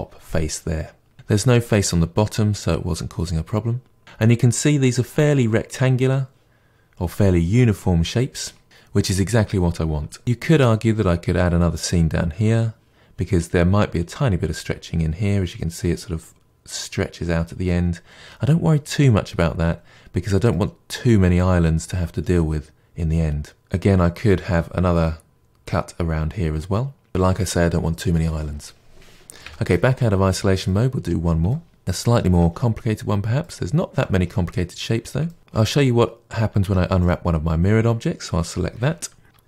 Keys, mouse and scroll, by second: 1.1-29.4 middle drag, 29.4 KP_Divide, 30.6-36.6 middle drag, 36.6 Tab, 37.0 click.